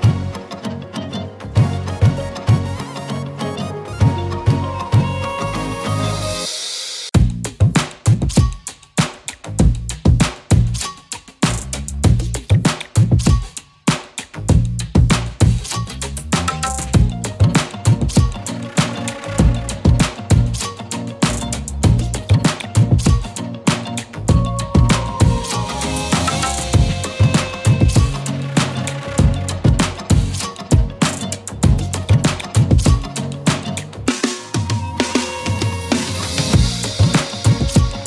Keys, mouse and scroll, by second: 0.4 right click, 1.2 click, 2.2-2.8 alt+drag, 6.6-7.9 alt+drag, 9.6 alt+space, 9.8-10.4 alt+click, 10.1 alt+space, 10.8-12.4 alt+drag, 14.6 alt+space, 14.8 alt+click, 15.1 alt+space, 15.8-16.4 alt+click, 17.0 ctrl+z, 17.5 click, 17.8-20.0 typing, 18.9 click, 19.3 click, 20.1 click, 22.0-22.4 scroll up 1, 22.4 z, 22.7 click, 24.6 right click, 25.4 click, 26.3 z, 26.6 click, 26.8 space, 26.8 click, 28.9 right click, 29.6 click, 32.2-33.7 typing, 33.1 click, 33.4 click, 33.7 click.